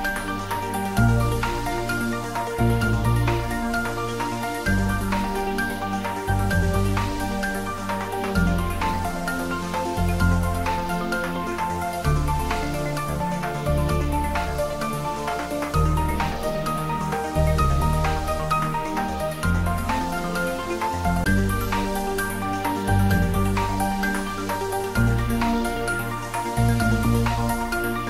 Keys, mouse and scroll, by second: 0.8 2, 1.0 click, 3.0-5.3 middle drag, 6.1 click, 6.9 s, 9.9 click, 10.3 middle click, 10.8 shift+z, 11.5-12.1 middle click, 12.3 shift+z, 12.9-14.5 scroll up 2, 14.8 ctrl+z, 16.6 Tab, 18.2 click, 19.5 s, 22.5 click, 22.9-23.5 middle click, 23.7 shift+z, 24.4 click, 25.5 scroll down 1, 25.9-26.8 middle click, 26.9 s.